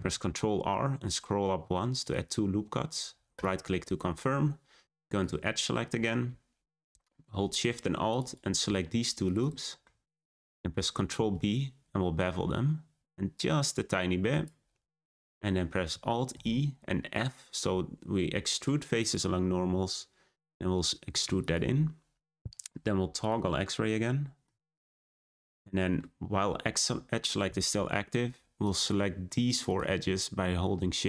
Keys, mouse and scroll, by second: 0.1 r, 5.1 click, 5.8-6.8 scroll up 4, 8.0 click, 8.2 click, 9.2 shift+click, 9.3 shift+click, 9.8 shift+middle click, 10.3-10.6 scroll up 1, 11.1 b, 16.3 alt+e, 22.4 z, 23.5 scroll down 2, 23.9 middle click, 24.7-25.4 scroll down 4, 25.4 shift+middle click, 25.9-27.6 scroll up 1, 28.6 click, 28.8 click, 29.5 shift+click, 29.6 shift+click.